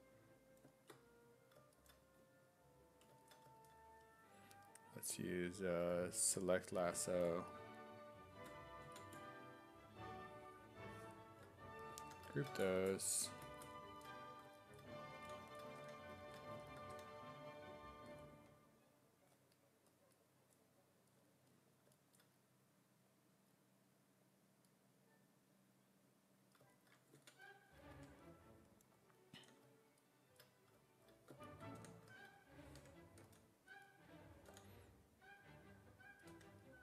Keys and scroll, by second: 12.1 ctrl+w, 15.2 s, 15.8 w, 17.0 w, 28.0 1, 29.4 w, 31.8 w, 32.8 1, 33.2 s, 34.5 e, 36.3 w.